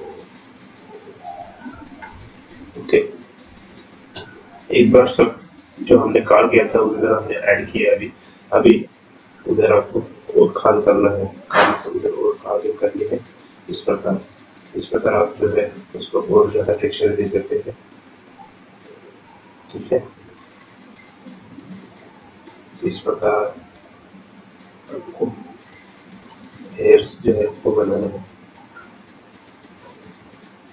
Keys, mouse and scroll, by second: 0.8-1.4 scroll up 5, 1.5 scroll down 1, 2.3 shift+middle click, 2.9-3.9 scroll up 5, 3.9 scroll up 1, 4.2 shift+middle click, 4.6-4.9 scroll up 2, 5.0 click, 5.5 click, 6.3-6.8 scroll down 2, 7.4 click, 8.3-9.3 scroll up 5, 8.8 shift+middle click, 9.7 shift+click, 19.1 scroll down 5, 20.5 scroll up 2, 20.7 scroll down 2, 21.0 scroll up 1, 21.2-21.9 scroll down 8, 22.0-23.4 scroll up 10, 23.4 middle click, 25.0 shift+scroll up 1, 25.1 shift+middle click, 25.5 scroll down 2, 25.7 middle click, 25.9 scroll up 4, 26.2 shift+middle click, 28.2 shift+click, 28.4-29.4 scroll down 6, 28.5 middle click, 29.0 middle click, 29.8 middle click, 29.8-30.3 scroll down 4, 30.1 scroll up 3, 30.4 click.